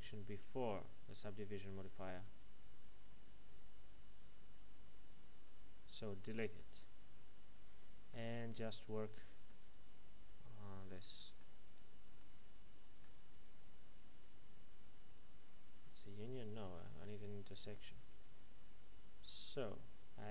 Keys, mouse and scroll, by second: 3.3 click, 6.5 middle click, 11.6 right click, 12.2 middle click, 14.1 click.